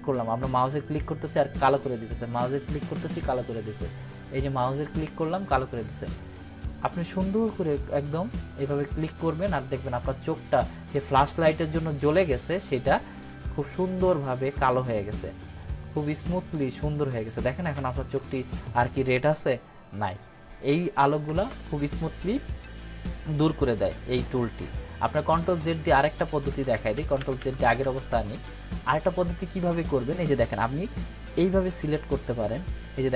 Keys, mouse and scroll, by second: 4.6 click, 7.2 click, 10.5 click, 12.1 click, 21.0 ctrl+-, 21.2 =, 24.7 ctrl+=, 25.2 ctrl+z, 31.2-33.1 drag.